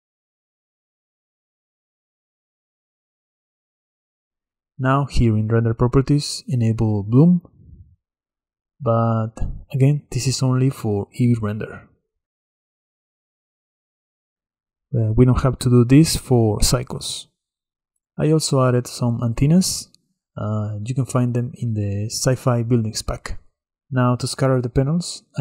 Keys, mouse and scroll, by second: 7.9 click, 8.9 click, 9.2-9.9 middle drag, 9.9 scroll down 3, 10.2-10.8 shift+middle drag, 10.8-13.0 scroll down 9, 13.0-14.3 scroll down 2, 14.3 scroll down 1, 14.5-14.9 middle drag, 14.9-16.0 scroll up 1, 16.0-17.9 scroll up 1, 17.9-19.2 scroll down 1, 19.2 click, 20.2-24.0 middle drag, 24.0 click.